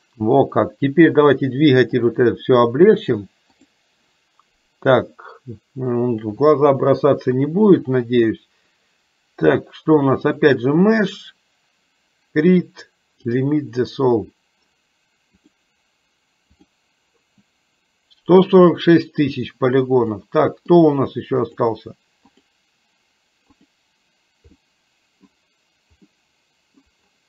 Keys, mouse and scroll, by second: 0.1 middle click, 1.9-3.9 drag, 10.5-13.7 drag, 15.5-16.7 drag, 20.2 middle click, 21.4 click, 22.5 click, 24.7 middle click, 26.2 middle click.